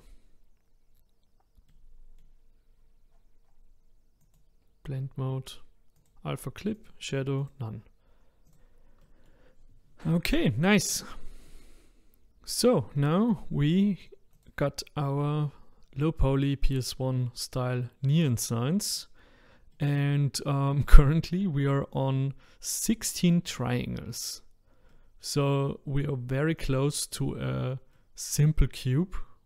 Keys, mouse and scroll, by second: 1.7-7.5 middle drag, 7.5 click, 8.4-23.3 middle drag, 23.3 click, 24.9-26.6 middle drag, 26.6 click, 27.6-29.4 middle drag.